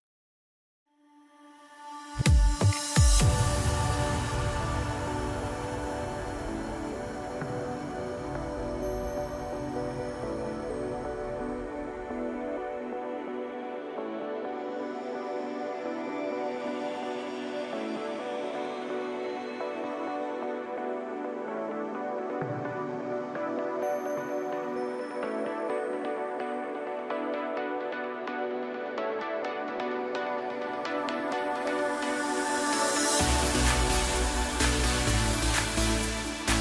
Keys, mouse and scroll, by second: 0.7 s, 3.8 KP_7, 4.8 scroll up 1, 5.6 s, 8.3-8.7 scroll up 2, 8.7-9.0 scroll down 3, 9.0-11.5 middle drag, 11.5-11.8 scroll up 3, 11.8-12.8 middle drag, 12.8 Tab, 13.2-13.6 scroll up 1, 13.6-13.9 scroll down 1, 13.9-15.5 middle drag, 15.5 KP_7, 16.8 ctrl+r, 20.7 s, 26.3 ctrl+r, 29.6 s, 32.8-33.1 scroll up 1, 33.2-33.5 scroll down 1, 33.5-35.4 middle drag, 35.4 click, 35.8-36.3 scroll up 2, 36.3-36.6 middle drag.